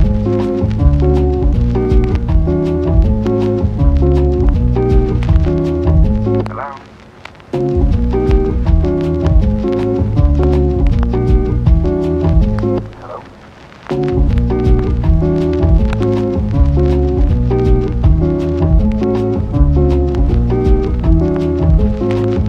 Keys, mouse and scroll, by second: 0.5 ctrl+z, 1.7 click, 4.3 ctrl+z, 4.5 ], 5.6 click, 7.1 click, 14.4 Return, 15.9 Return, 16.3 click, 16.9 Return, 17.8 Return, 18.7 Return, 20.5 Return, 21.2 Return.